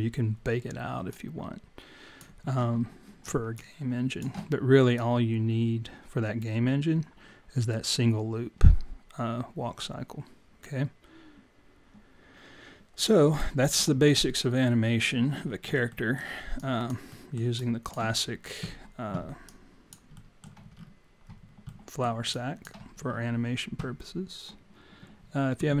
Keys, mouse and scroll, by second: 2.7 click, 2.7-3.1 scroll down 1, 3.6 alt+click, 3.6 scroll down 3, 5.0 click, 14.9 alt+click, 15.5-15.9 scroll up 4, 15.9 alt+middle click, 16.6 alt+click, 17.1 alt+middle click, 17.6 alt+click, 19.4 alt+click, 20.2 alt+middle click, 20.7-21.5 scroll up 1, 21.5 scroll up 4, 21.7 alt+middle click, 22.3 alt+click, 22.9-23.7 scroll down 3.